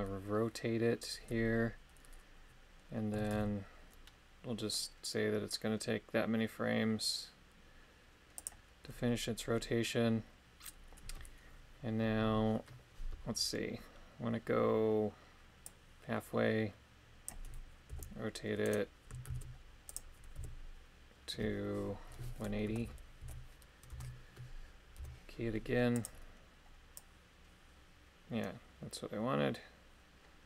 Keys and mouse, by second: 3.3 shift+d, 8.3 click, 15.7-17.3 drag, 17.9 r, 18.6 right click, 19.2 shift+s, 20.3 r, 22.6 KP_1, 22.8 KP_8, 23.2 KP_0, 23.9 Return, 24.9 i, 27.0 click.